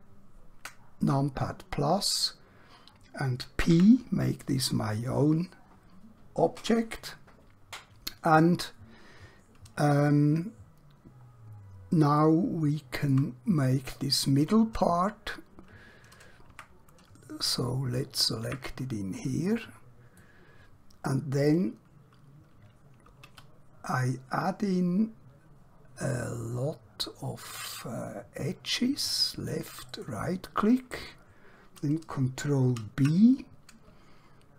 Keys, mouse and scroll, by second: 3.6 p, 4.3 click, 10.4-10.8 scroll down 1, 11.3-12.0 scroll up 1, 12.3 shift+middle click, 16.5 Tab, 17.4 click, 18.4 Tab, 19.6-20.3 scroll up 1, 20.3 middle click, 23.1 alt+q, 24.5-28.9 scroll up 1, 29.1 click, 29.9 right click, 31.2 scroll up 1, 32.6 b.